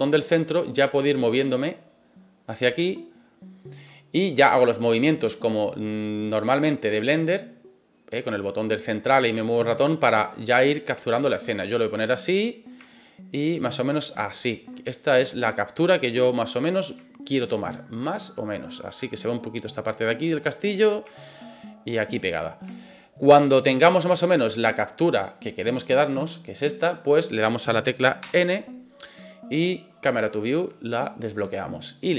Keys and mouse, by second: 4.2-10.4 middle drag, 11.0-11.4 shift+middle drag, 12.2 middle click, 12.8-13.7 shift+middle drag, 14.9-16.5 ctrl+middle drag, 17.0 shift+middle click, 17.8-19.1 middle drag, 21.3 shift+middle click, 22.8-24.0 shift+middle drag, 28.2 n, 30.1 click.